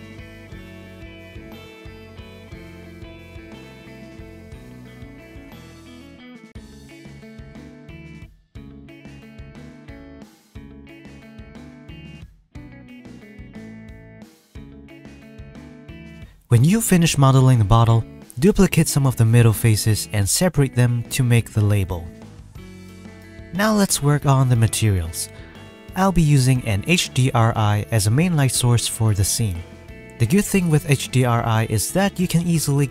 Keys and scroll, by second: 0.5 ctrl+z, 0.7 ctrl+r, 2.6 Tab, 2.7 Tab, 2.7 s, 2.8 Tab, 3.0 KP_1, 3.3 alt+z, 3.4 alt+a, 3.4 Tab, 3.7 b, 4.0 Tab, 4.3 KP_1, 4.5 Tab, 4.8 ctrl+b, 4.9 Tab, 5.6 ctrl+s, 5.7 KP_1, 6.1 ctrl+r, 6.7 Tab, 6.8 Tab, 6.9 ctrl+r, 7.3 Tab, 7.4-10.1 typing, 7.9 ctrl+s, 8.0 Tab, 8.1 alt+a, 9.0 Tab, 11.1-15.3 typing, 12.5 ctrl+r, 12.6 Tab, 13.6 ctrl+a, 14.4 Tab, 14.5 ctrl+r, 14.6 Tab, 14.8 ctrl+s, 15.3 Tab, 15.4 ctrl+r, 17.8 Tab, 18.1 alt+a, 18.7 Tab, 19.1 Tab, 19.6 alt+a, 19.7 Tab, 20.2 Tab, 21.2 shift+d, 21.4 p, 21.8 Tab, 22.3 Tab, 22.5 a, 22.9 alt+s, 23.6 s, 24.5 Tab, 24.6 g.